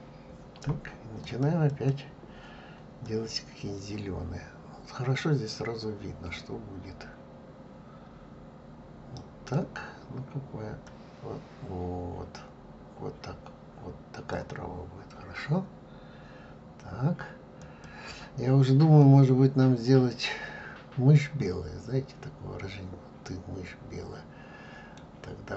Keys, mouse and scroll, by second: 1.3 e, 3.2 click, 17.9 click, 19.3-22.1 middle drag.